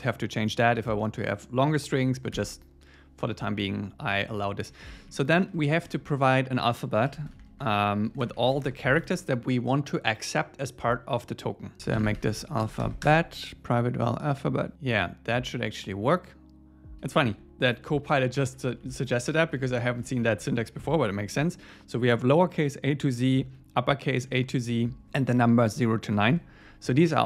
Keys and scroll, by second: 2.3 Escape, 4.7 Up, 5.4 super+Right, 5.7 Return, 17.7 alt+shift+Left, 18.4 alt+shift+Left, 19.0 alt+shift+Left, 19.5 alt+shift+Left, 20.5 alt+shift+Left, 21.2 alt+shift+Left, 21.8 Left, 22.4 Right, 26.3 super+Right.